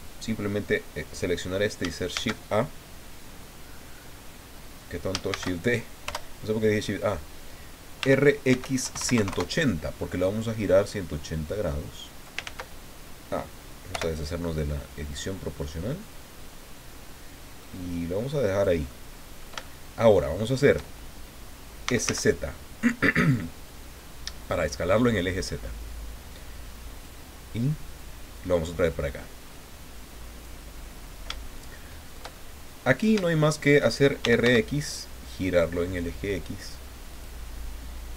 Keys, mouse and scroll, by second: 2.1 shift+a, 5.3 shift+d, 6.0 Return, 8.0-9.2 typing, 9.3 KP_Enter, 11.3-12.4 drag, 12.4 ctrl+z, 13.9 o, 15.2-18.8 drag, 18.9 middle click, 19.6-20.8 shift+middle drag, 21.6-22.5 typing, 26.9 click, 27.9-30.6 drag, 30.8-32.3 middle drag, 32.7 middle click, 33.2 shift+middle click, 33.9-34.9 typing, 37.1 click.